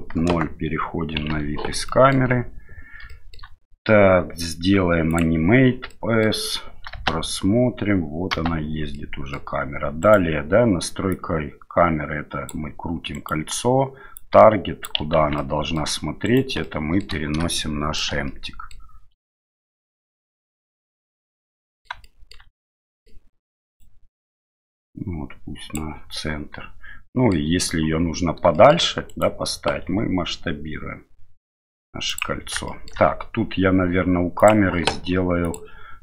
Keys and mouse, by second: 0.3 KP_0, 1.8 middle drag, 3.2 shift+middle click, 5.1 click, 6.0 middle click, 6.9 space, 8.3 space, 9.0-9.4 middle drag, 10.0 right click, 11.1-12.5 drag, 13.1 right click, 14.1-14.8 drag, 15.2 ctrl+z, 15.4 middle click, 16.2 right click, 16.7 middle click, 17.5 shift+middle click, 18.3 middle click, 19.3-20.7 shift+middle drag, 21.6 middle click, 22.1 shift+middle drag, 22.6-23.1 middle drag, 23.8-25.7 drag, 27.2 middle click, 28.6 shift+middle click, 29.1 right click, 29.9 s, 32.7 shift+middle click, 34.4 click, 35.5 click.